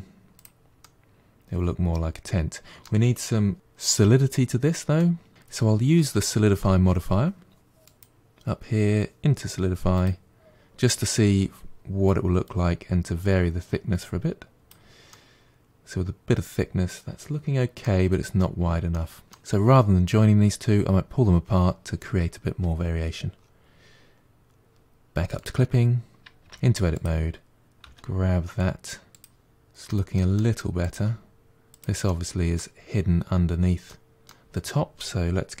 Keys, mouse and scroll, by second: 0.7-3.5 middle drag, 4.8 middle click, 7.7-10.7 drag, 12.3-14.9 drag, 14.9-18.0 middle drag, 18.7-19.4 middle drag, 25.2 click, 26.3 Tab, 26.8 click, 27.7 g, 29.3-30.7 middle drag, 30.7 click, 30.7 g, 31.9-35.6 middle drag.